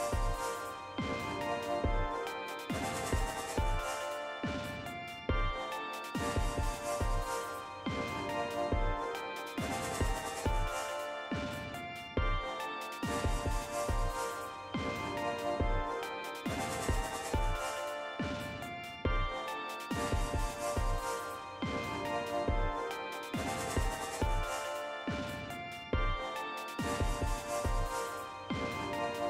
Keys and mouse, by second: 2.5 click, 12.5 click, 14.1 click, 14.5 click, 15.4-16.7 drag, 18.4 BackSpace, 21.8-23.0 drag, 24.8 click, 26.3 click, 27.8-29.2 drag.